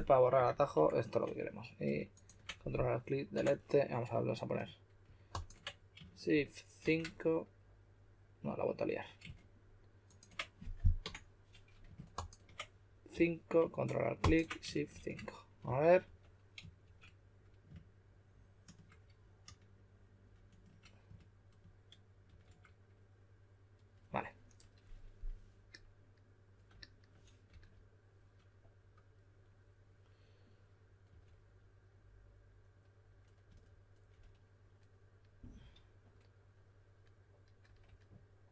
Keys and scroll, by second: 0.7 BackSpace, 3.3 BackSpace, 6.7 shift+5, 11.0 BackSpace, 13.1 5, 14.9-16.8 typing, 22.2 shift+5, 27.4 s, 30.8-31.5 typing, 33.4 typing.